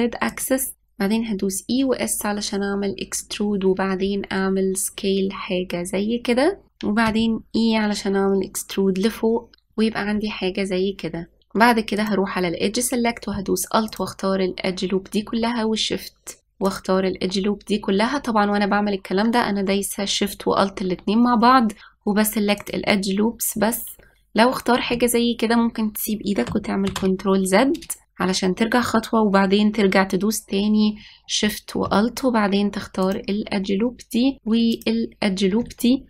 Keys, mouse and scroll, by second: 7.7 e, 12.6-14.6 drag, 17.3 alt+shift+click, 23.2 alt+shift+click, 27.6 ctrl+z, 31.6-33.7 scroll up 1, 33.7 alt+shift+click, 35.4 alt+shift+click.